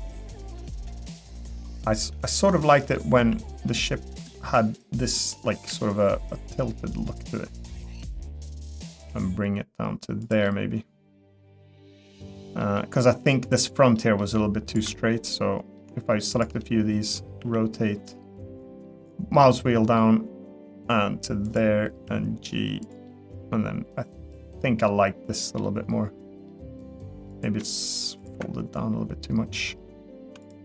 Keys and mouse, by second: 2.5 middle click, 3.2 g, 5.3 middle click, 5.7 r, 7.9 g, 10.4-12.0 middle drag, 12.3 middle click, 12.6 middle click, 13.9 middle click, 14.7 ctrl+click, 14.9 middle click, 16.6 middle click, 17.4 r, 21.9 g, 23.1-25.4 middle drag, 25.6 middle click, 27.3 click.